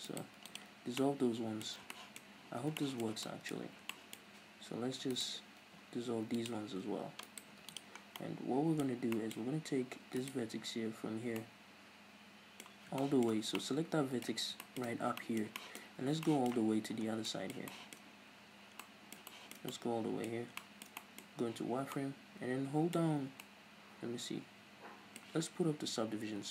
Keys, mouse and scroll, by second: 0.1 alt+right click, 0.4 x, 0.8 scroll down 2, 1.0-2.4 middle drag, 1.8 scroll down 2, 2.4 scroll up 2, 2.6-5.2 shift+middle drag, 2.6 scroll down 2, 3.6-5.2 scroll up 4, 5.2 alt+right click, 6.0 x, 7.3 alt+right click, 7.6 x, 8.0 scroll down 2, 8.2-10.3 middle drag, 10.3 right click, 11.4-15.9 middle drag, 14.4 scroll down 2, 15.9-16.3 scroll up 3, 16.0-21.4 shift+middle drag, 16.8-17.3 scroll down 2, 18.3-18.8 scroll up 2, 20.3-20.7 scroll up 2, 21.3 scroll up 2, 21.6 z, 22.0 middle click, 23.1-26.5 middle drag, 23.1 z.